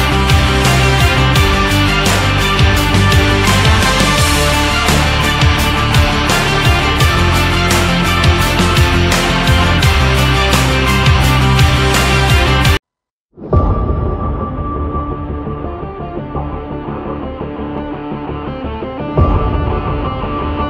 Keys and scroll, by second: 14.2 shift+Down.